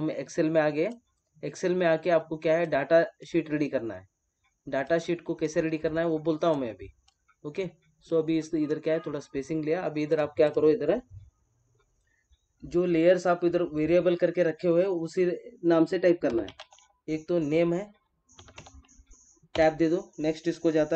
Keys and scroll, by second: 19.5 Tab.